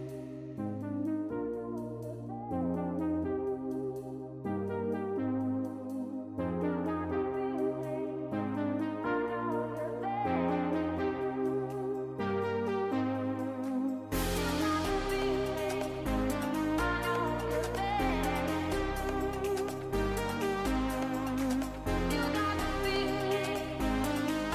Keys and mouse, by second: 0.3 click, 0.5 click, 1.4 click, 1.8 middle click, 3.0 middle click, 5.8-6.3 drag, 7.5 click, 9.8-11.0 drag, 11.4 click, 11.6 click.